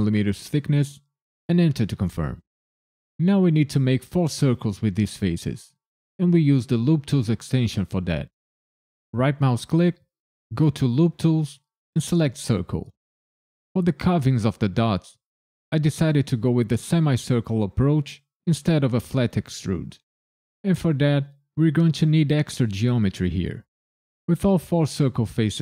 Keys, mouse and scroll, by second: 1.5 KP_Enter, 9.1 right click.